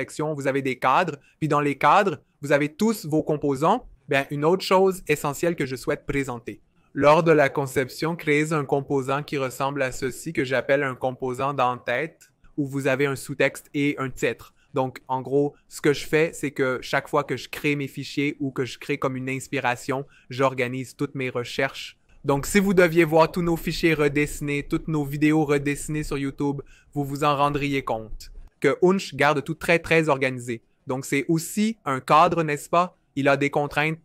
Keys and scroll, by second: 32.8 v.